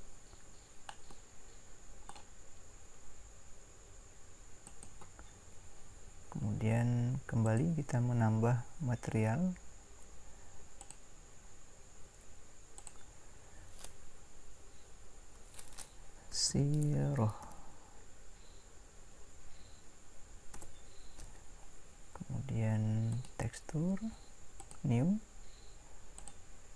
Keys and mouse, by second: 1.6-3.0 right drag.